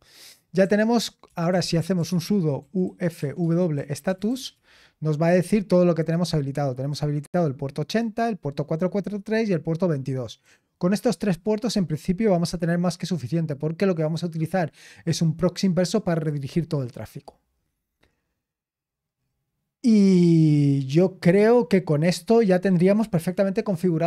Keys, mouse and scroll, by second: 0.6-4.9 typing, 12.2-13.3 scroll down 2, 13.3-14.9 scroll down 1, 14.9-16.1 scroll down 1, 16.1-17.8 scroll down 1, 17.8-20.6 scroll down 4, 20.6-21.3 scroll down 1, 21.3-21.8 scroll down 1, 21.8-24.0 scroll up 3.